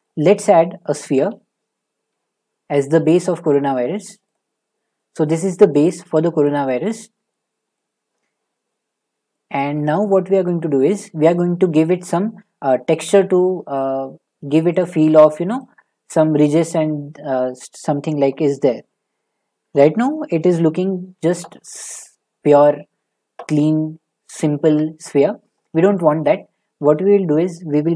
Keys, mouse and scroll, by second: 0.0 middle click, 0.3 middle click, 0.3 middle click, 1.0 middle click, 1.0 a, 4.3 click, 5.5 middle click, 5.9 right click, 6.5 click, 6.8 middle click, 6.8 middle click, 7.0 middle click, 7.8 middle click, 14.8 click, 15.5 click, 20.1 scroll, 25.9 click.